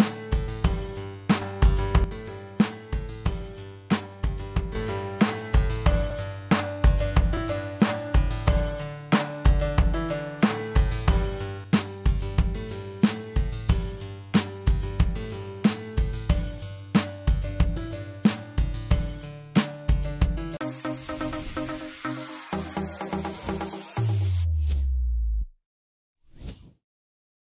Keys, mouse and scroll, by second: 16.7 click, 16.8 click.